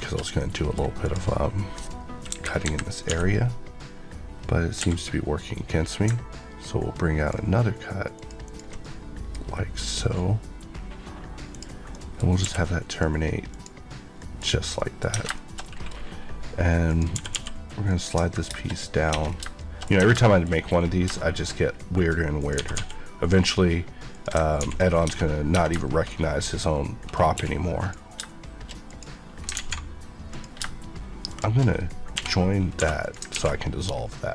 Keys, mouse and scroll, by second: 0.3 middle click, 1.0 click, 2.3 KP_1, 2.6 KP_3, 3.1 d, 4.7 Escape, 5.8 click, 8.1 ctrl+click, 8.5 ctrl+Left, 8.8 middle click, 11.5 click, 11.9 middle click, 12.2 ctrl+scroll up 2, 12.4 q, 12.9 click, 13.4 click, 14.2 middle click, 14.4 scroll up 1, 14.7 middle click, 15.1 Tab, 15.3 shift+middle click, 15.6 scroll up 1, 17.1 g, 17.9 click, 19.1 click, 19.2 scroll down 1, 19.6 middle click, 19.9 scroll up 1, 20.1 shift+Tab, 20.2 middle click, 20.4-22.4 shift+scroll up 5, 21.1 shift+middle click, 22.4 click, 22.5 g, 24.1 click, 24.6 ctrl+x, 25.0 Tab, 25.8 shift+middle click, 26.0-26.4 shift+scroll up 2, 27.3 scroll up 1, 27.3 1, 27.8 click, 28.2 shift+click, 29.4 alt+click, 29.5 alt+z, 30.3 click, 31.3 shift+click, 32.8 2, 33.0 click, 33.3 ctrl+x, 34.1 middle click.